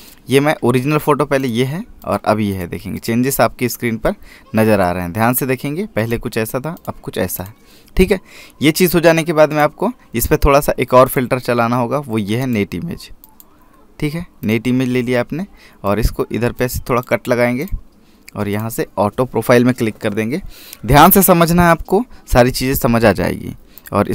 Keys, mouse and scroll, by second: 5.1 click, 10.3 click.